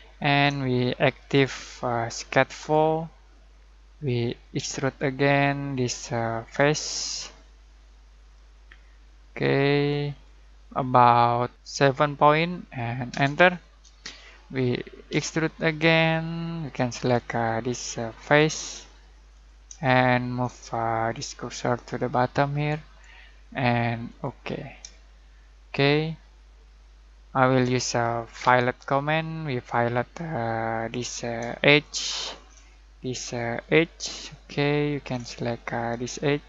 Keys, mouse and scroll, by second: 1.1 click, 3.0 click, 4.5 e, 6.4 click, 11.7 7, 13.1 Return, 15.1 e, 15.9-16.5 middle click, 17.1 click, 19.8-20.4 shift+middle drag, 21.9-23.2 drag, 25.0-27.8 shift+middle drag, 28.4 f, 29.6-30.7 scroll down 1, 30.7 click, 31.6-32.5 shift+middle drag, 33.6 click, 34.1-35.1 shift+middle drag.